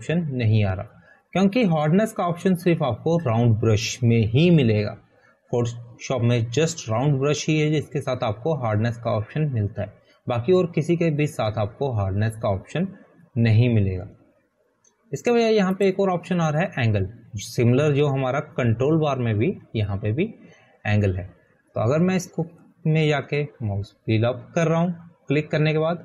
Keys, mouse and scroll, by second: 18.2 click, 24.9 click, 25.0 scroll up 1.